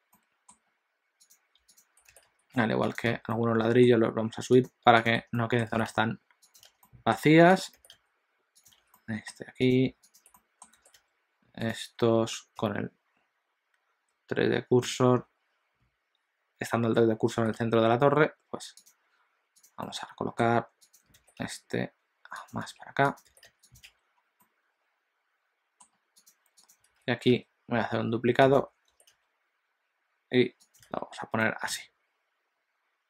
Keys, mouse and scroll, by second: 0.2 middle click, 1.2 click, 1.8 shift+click, 2.1 g, 3.2 alt+a, 3.4 middle click, 4.6 click, 5.1 shift+click, 5.3 middle click, 5.7 g, 6.7 alt+a, 6.9 middle click, 7.7 click, 7.9 g, 8.9 alt+a, 9.0 middle click, 9.6 click, 10.2 shift+click, 10.4 middle click, 10.8 r, 12.7 ., 19.8 click, 19.8 middle click, 20.8 click, 21.2 r, 22.7 alt+a, 23.0 click, 23.3 g, 23.9 alt+a, 24.2 scroll down 1, 24.5 middle click, 26.1 click, 26.8 click, 27.0 alt+d, 29.0 r, 30.9 alt+a, 31.5 middle click.